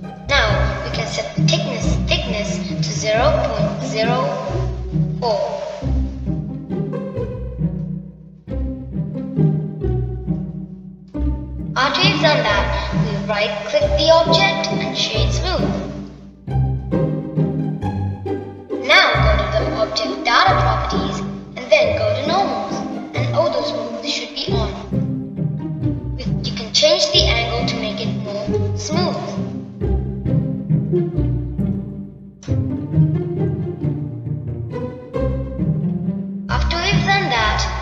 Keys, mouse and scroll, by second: 1.0-2.0 scroll down 1, 2.0-5.1 drag, 9.7-12.6 middle drag, 12.6-12.9 scroll down 2, 12.9-15.7 middle drag, 15.7-17.9 right drag, 17.9-21.0 middle drag, 22.4 click, 24.1-25.5 drag, 26.4-27.8 middle drag, 27.8-30.8 drag, 31.0-33.6 middle drag, 33.6-34.8 drag, 34.8-37.8 middle drag.